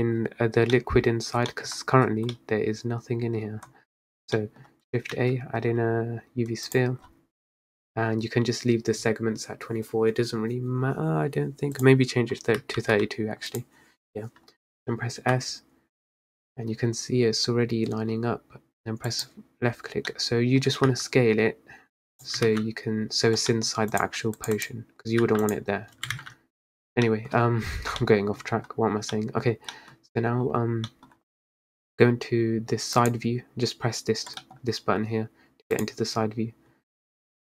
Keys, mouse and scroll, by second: 0.7-2.4 scroll up 14, 0.9 middle click, 1.6 middle click, 2.4-3.8 middle drag, 3.8-5.5 scroll down 18, 4.5-4.8 middle drag, 5.5 shift+a, 7.2-7.6 scroll up 6, 7.7-8.7 scroll down 2, 11.9-13.7 drag, 15.3 s, 20.2-21.0 middle drag, 21.0 s, 22.5 ctrl+z, 23.6 middle click, 24.1 click, 24.5 click, 24.7 click, 25.3 s, 26.3 ctrl+z, 27.2 middle drag, 27.4-28.1 scroll down 4, 28.1-28.5 middle drag, 28.5-29.8 scroll up 7, 29.2-29.6 middle drag, 29.8 middle click, 30.1-30.7 scroll down 3, 30.7 scroll down 1, 31.0-33.1 middle drag, 33.1 click, 34.5-35.9 middle drag, 35.9 click.